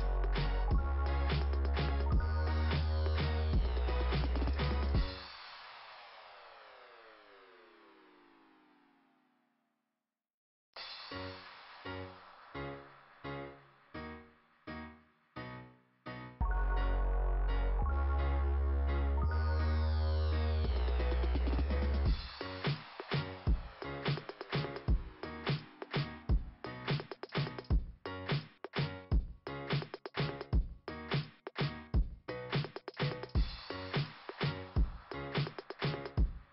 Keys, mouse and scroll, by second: 0.6 click, 4.4 click, 10.0 click.